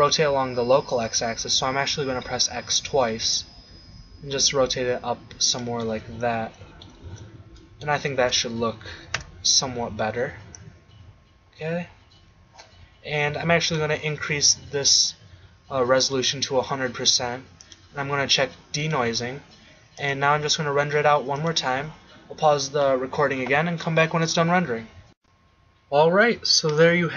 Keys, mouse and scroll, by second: 5.6 click, 5.9-7.1 middle drag, 7.1 shift+z, 9.2 KP_0, 13.8-22.5 drag.